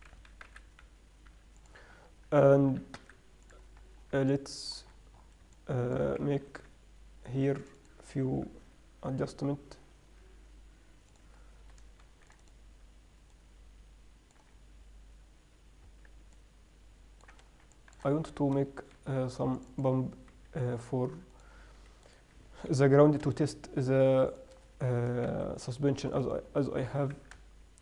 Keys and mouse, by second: 0.1 s, 3.0 click, 3.0 s, 4.4 Tab, 6.8 ctrl+r, 8.8 ctrl+b, 12.3 ctrl+r, 16.2 Tab, 17.7-18.4 drag, 18.4 Tab, 19.0 ctrl+r, 20.6 a, 21.7-23.0 drag, 22.4 right click, 23.0 ctrl+b, 25.6 ctrl+r, 27.2 g.